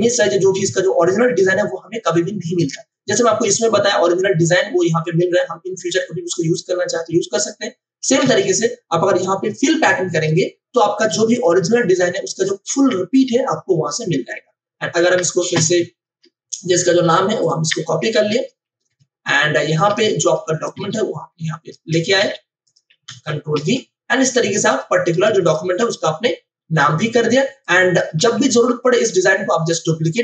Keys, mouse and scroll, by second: 8.2 ctrl+alt+z, 9.5 click, 16.0 ctrl+o, 17.4 click, 17.6 F2, 18.3 ctrl+c, 18.7 Escape, 19.8 v, 20.2 click, 22.2 t, 22.6 click, 23.0 ctrl+a, 24.6 ctrl+v, 24.6 click, 25.2 ctrl+space, 25.4 ctrl+click, 25.7 ctrl+space, 27.4 space, 27.6 click, 28.1 v, 28.5 click.